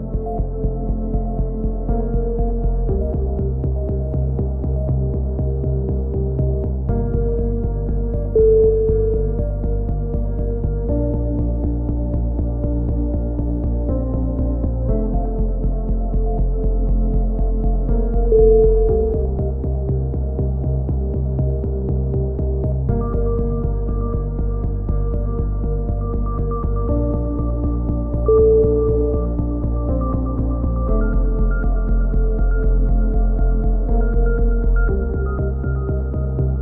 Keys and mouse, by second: 0.1 click, 0.4 shift+q, 1.0 a, 1.5-6.9 drag, 1.9 f, 2.8 f, 6.4 a, 6.9 ctrl+z, 7.2 f, 8.1 shift+right click, 9.0 f, 9.2 a, 10.0 KP_3, 10.7 alt+h, 11.1 a, 12.3 a, 13.4 drag, 15.8-17.1 drag, 17.1 ctrl+KP_1, 17.3 z, 17.7 KP_1, 21.8 KP_3, 22.1 shift+s, 24.3 ctrl+l, 24.3 right click, 24.8 ctrl+i, 25.2 h, 26.8 ctrl+l, 26.8 right click, 30.3 alt+r, 30.8 t, 35.0 click.